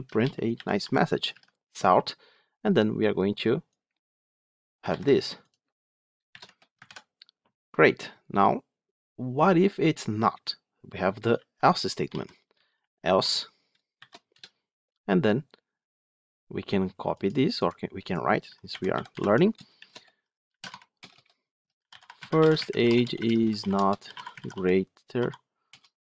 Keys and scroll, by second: 1.2 Tab, 5.0 ctrl+c, 6.7 ctrl+v, 19.1 Tab.